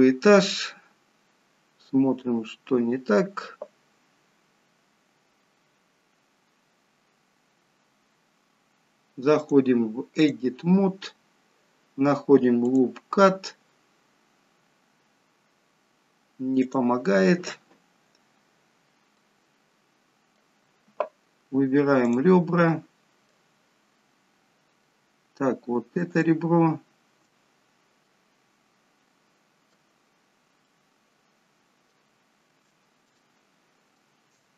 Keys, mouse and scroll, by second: 5.3 scroll down 1, 6.9-8.7 scroll up 1, 9.5 click, 12.7 click, 23.0 middle click, 23.0 click, 23.9 middle click, 23.9-24.8 scroll up 1, 26.1 shift+click, 31.7 middle click, 31.7-32.7 scroll up 6, 33.2 shift+middle click.